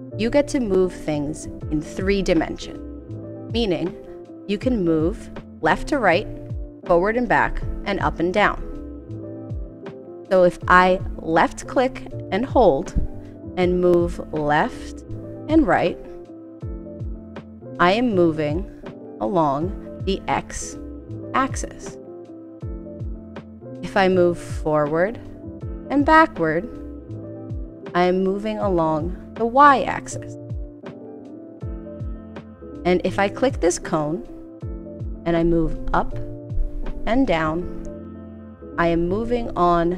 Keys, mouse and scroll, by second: 11.2-32.3 drag.